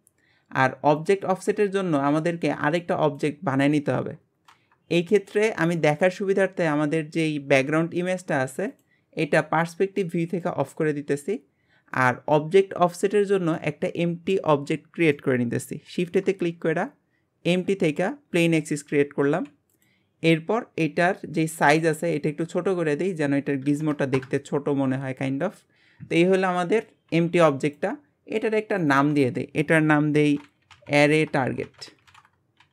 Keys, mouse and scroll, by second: 1.0-4.8 drag, 6.0 click, 8.7 click, 10.3 click, 11.9-15.9 shift+middle drag, 15.9 shift+a, 18.8-19.2 scroll down 1, 19.2 g, 22.0-25.0 drag, 25.2-25.8 scroll up 2, 28.7 click, 28.9-30.6 drag, 30.6 r.